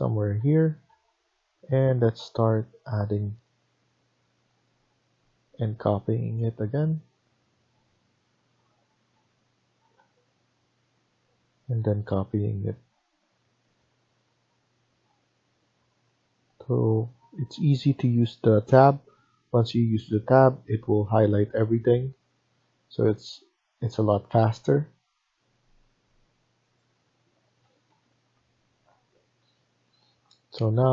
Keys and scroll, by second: 0.4 Tab, 0.7 Tab, 8.7 Escape, 9.1 Escape, 9.7 Tab, 27.5 Escape, 27.7 Escape.